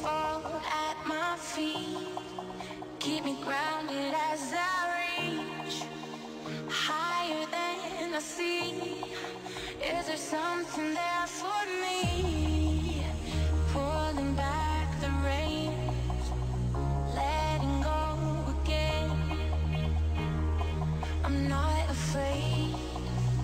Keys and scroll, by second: 23.3 p.